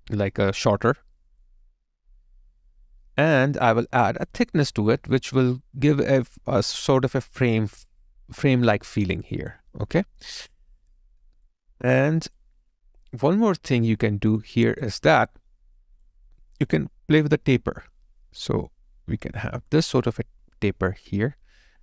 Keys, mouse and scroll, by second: 0.0 alt+right click, 0.4 alt+middle click, 8.8 alt+right click, 9.3 alt+click, 9.7 alt+middle click, 10.2 alt+right click, 10.6 alt+click, 14.6 alt+right click, 14.9 alt+click.